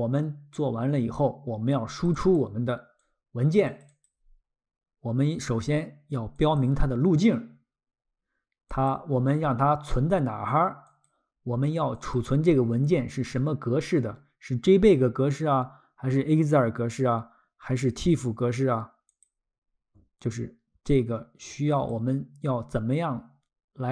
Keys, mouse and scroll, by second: 1.2 click, 1.9 click, 3.0 click, 3.7 click, 4.0 click, 6.4 click, 8.7 click, 10.8 click, 19.1 click, 21.7 click.